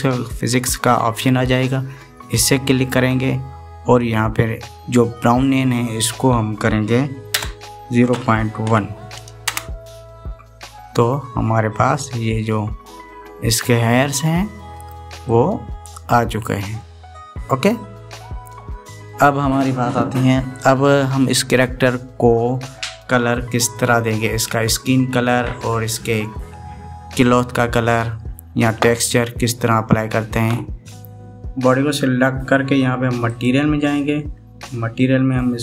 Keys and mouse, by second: 2.2 click, 6.4-10.8 drag, 12.6-15.4 middle drag, 16.0-17.0 middle drag, 17.6-18.9 middle drag, 33.9 click.